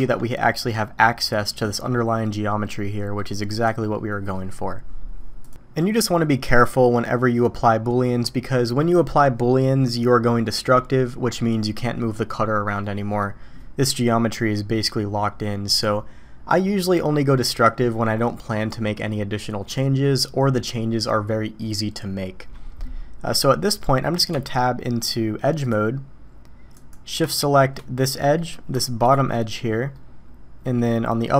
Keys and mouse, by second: 0.0 Tab, 0.5-1.3 middle drag, 2.6 middle click, 12.8-13.2 middle drag, 22.8-23.4 middle drag, 24.7 Tab, 26.7 click, 28.3 click, 29.1 shift+click, 29.9-31.2 middle drag.